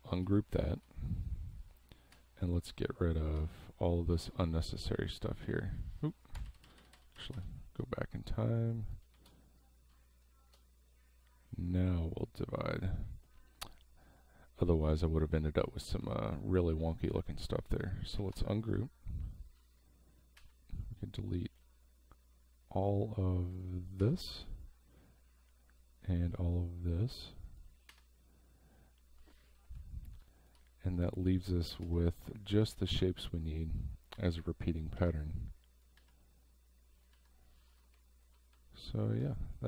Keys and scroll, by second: 2.1 Delete, 6.5 ctrl+z, 9.1 shift+x, 17.2 space, 18.2 ctrl+shift+g, 20.4 Delete, 24.0 Delete, 27.9 Delete, 30.2 space, 31.8 Delete, 37.9 space, 39.2 space.